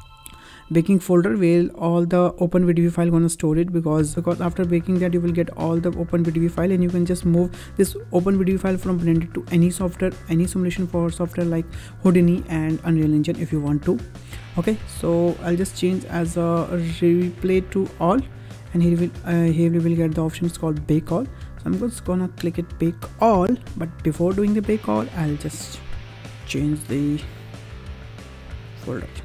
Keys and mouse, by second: 15.4-18.1 drag.